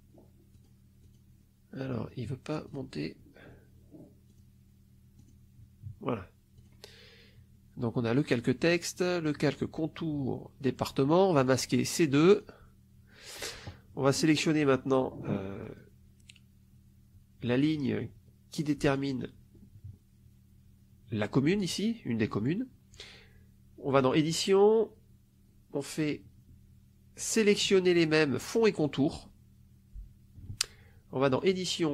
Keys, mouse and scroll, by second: 0.5 click, 0.9 click, 2.6 click, 4.3 click, 5.1 click, 6.5 click, 11.4 click, 12.2 click, 15.6 click, 18.7 click, 23.9 click, 28.7 click, 31.3 click.